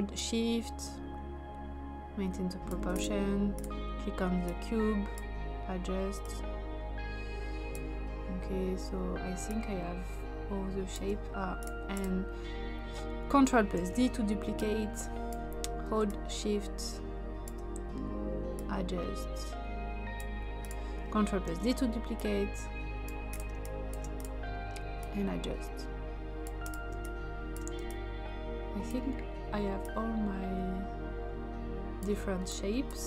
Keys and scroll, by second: 13.8 ctrl+d, 21.4 ctrl+d, 23.6 space, 27.0 space.